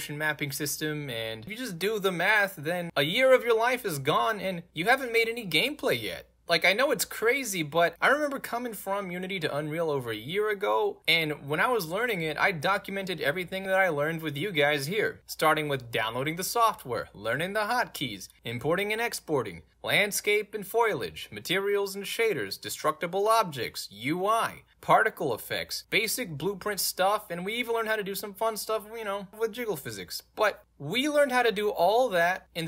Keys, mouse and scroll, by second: 0.2 scroll down 2, 2.0-2.6 scroll down 2, 2.6-16.8 middle drag, 27.3 click.